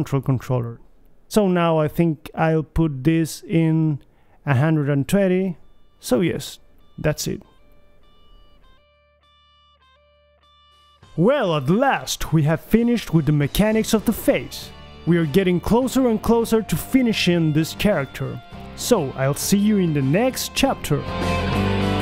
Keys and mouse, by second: 1.3 ctrl+c, 1.8 ctrl+v, 3.7 BackSpace, 4.2 BackSpace, 6.5 g, 8.9 middle click, 9.8 ctrl+c, 10.6 ctrl+v, 11.1 ctrl+c, 11.3 ctrl+v, 12.2 g, 14.1 alt+g, 14.9-18.2 middle drag, 17.2 g, 18.6 click, 18.6-21.9 typing, 21.7 click.